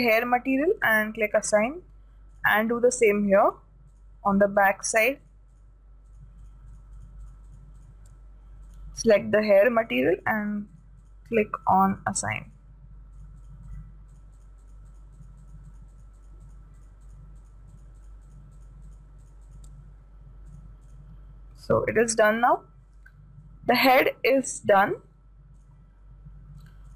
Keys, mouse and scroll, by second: 0.7-3.1 drag, 1.7-3.4 middle drag, 2.8-21.6 right drag, 3.6 middle click, 20.9-23.3 drag, 22.3 a, 22.8-25.6 middle drag, 25.6-26.0 scroll up 1.